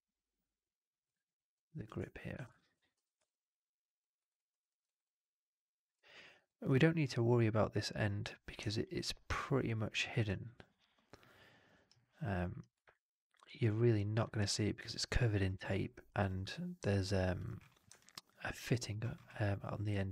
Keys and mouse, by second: 2.2 shift+x, 2.4 alt+click, 2.8 4, 3.1-3.9 alt+drag, 4.1 alt+right drag, 4.2 alt+click, 4.6 alt+middle drag, 4.7 alt+right drag, 4.9-5.8 alt+drag, 6.0 alt+middle drag, 6.2 alt+click, 8.7-10.0 alt+drag.